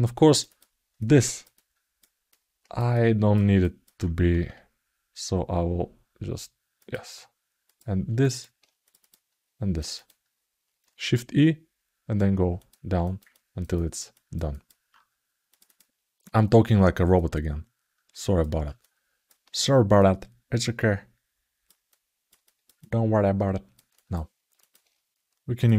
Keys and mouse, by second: 0.2 click, 0.7 middle click, 1.3 ctrl+alt+middle click, 2.0 alt+middle click, 2.7 alt+shift+middle click, 3.4 alt+middle click, 4.1 shift+e, 7.5 click, 8.0 middle click, 8.8 click, 9.6 shift+click, 9.7 shift+click, 10.8 shift+e, 12.8 alt+middle click, 13.1 ctrl+alt+middle click, 13.5 alt+middle click, 13.9 ctrl+alt+middle click, 14.3 alt+middle click, 15.3 click, 15.4 click, 17.0-18.2 drag, 18.5 alt+middle click, 19.7-21.4 drag, 21.6 alt+middle click, 22.2-23.5 ctrl+alt+middle drag, 23.7 ctrl+alt+middle click, 24.3 ctrl+alt+middle click, 25.3 click.